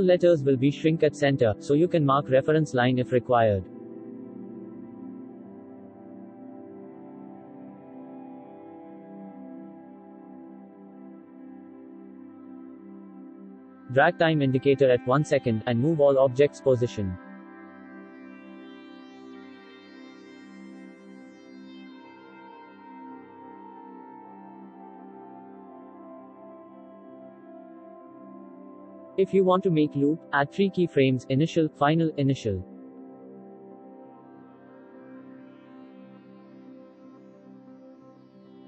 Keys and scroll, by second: 22.5 ctrl+z, 31.6 ctrl+c, 31.7 ctrl+v.